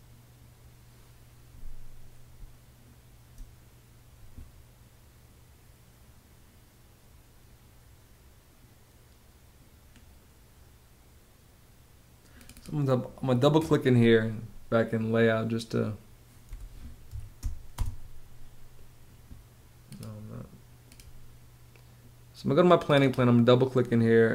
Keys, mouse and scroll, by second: 1.9 space, 16.1 p, 16.7 s, 17.3 space.